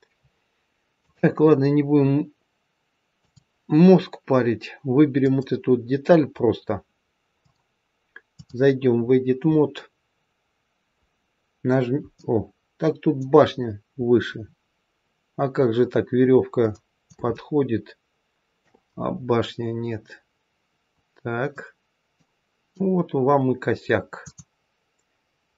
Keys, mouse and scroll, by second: 0.8 scroll down 1, 0.9 click, 5.2 click, 7.4 click, 8.9-10.4 scroll up 6, 12.1 middle click, 13.4-15.2 scroll down 5, 15.2-16.6 scroll down 2, 16.6 middle click, 17.2 shift+middle click, 19.0-19.6 scroll up 2, 19.9-20.4 scroll up 1, 21.5 middle click, 24.2 click.